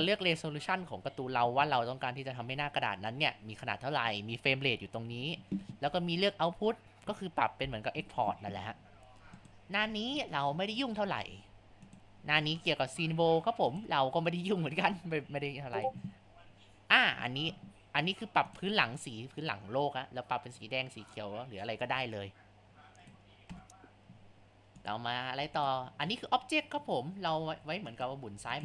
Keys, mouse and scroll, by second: 9.4 click, 10.2-10.8 scroll down 10, 10.8-11.8 scroll up 9, 11.8-12.6 drag, 12.6-12.9 scroll down 5, 12.9-13.3 scroll up 4, 13.7-15.8 drag, 18.5 click, 24.8 click, 25.6 click, 27.5 Tab, 28.3 Tab.